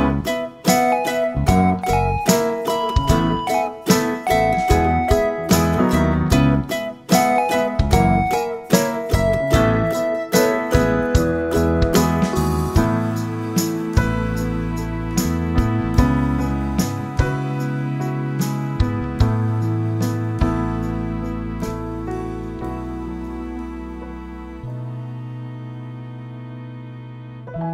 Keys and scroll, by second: 14.6 ctrl+z, 20.4 ctrl+z, 24.4 ctrl+z.